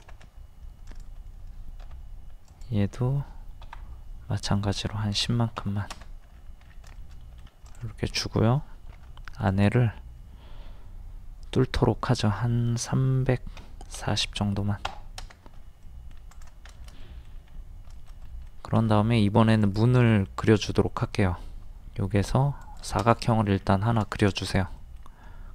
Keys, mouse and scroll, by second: 0.9 click, 1.8 typing, 3.7 Up, 5.2 KP_1, 5.4 KP_0, 6.3-6.6 scroll down 1, 7.4 shift+middle click, 7.7 click, 8.2 middle click, 9.0 typing, 9.5-10.6 drag, 13.6 KP_3, 14.0 KP_4, 14.1 KP_0, 15.6 space, 15.8 middle click, 16.3 click, 16.7 shift+middle click, 17.5 scroll up 1, 18.0 shift+middle click, 19.6 click, 23.2 middle click, 23.6-24.0 scroll down 1, 24.1 shift+middle click, 24.8-25.1 scroll up 1.